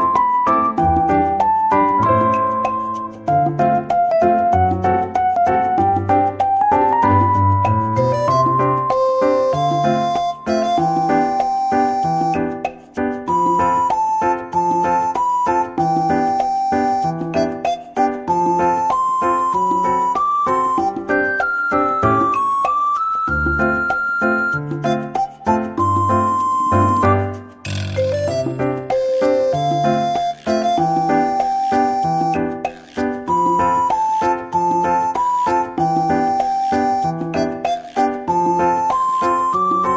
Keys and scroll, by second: 2.0 ctrl+s, 8.2-10.1 typing, 10.6 Delete, 12.3 Tab, 12.6-13.5 typing, 15.2 Tab.